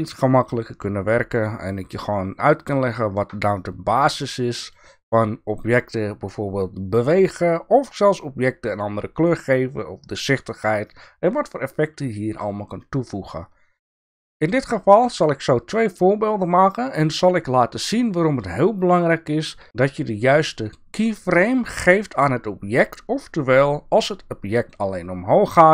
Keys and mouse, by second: 2.2 shift+middle click, 2.6-3.3 shift+middle drag, 3.7-4.4 drag, 4.4-4.7 middle drag, 11.0 click, 11.0-14.0 middle drag.